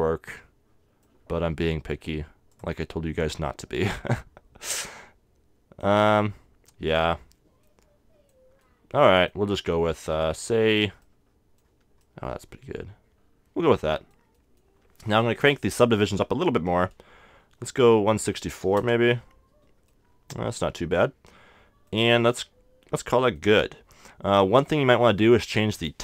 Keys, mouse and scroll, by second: 0.3-2.5 middle drag, 2.5-4.4 drag, 3.2-5.0 middle drag, 6.8-8.7 drag, 7.6-10.5 middle drag, 10.1-12.0 drag, 11.0-13.8 middle drag, 14.3-16.0 middle drag, 16.0-18.0 drag, 19.9-21.7 middle drag, 22.2-25.3 middle drag.